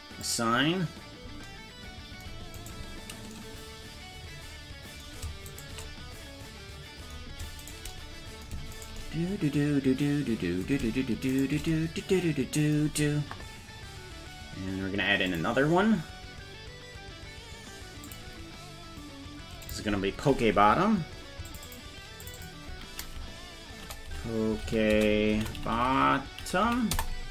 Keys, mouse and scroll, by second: 0.2 click, 2.6 right click, 5.5 shift+right click, 7.6 shift+right click, 8.8 shift+right click, 11.3 shift+right click, 15.3 click, 18.1 click, 19.7 click, 21.5 click, 21.7 click, 22.3 click, 22.4-27.3 drag, 25.9 t.